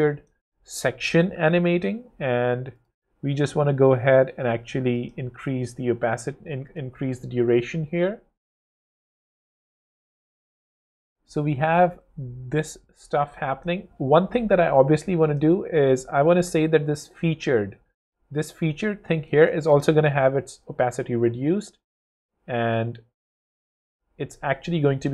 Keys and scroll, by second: 6.9 w, 19.5 0, 24.9 0.